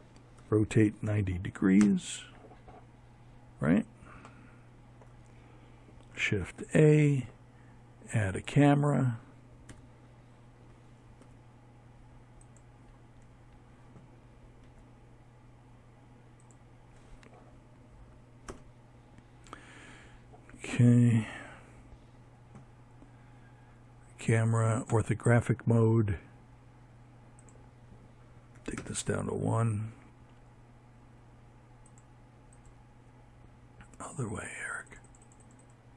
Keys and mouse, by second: 4.5 shift+a, 7.6 KP_1, 9.1 g, 12.5 g, 16.4 ctrl+KP_0, 22.8-28.4 drag, 29.8-33.4 drag, 33.7-35.9 drag.